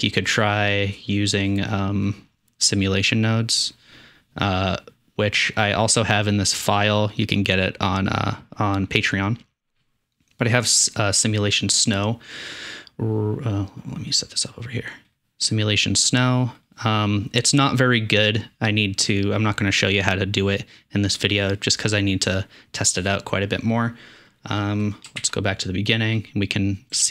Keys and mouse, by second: 6.4-11.2 drag, 14.2 click, 25.2 shift+Left.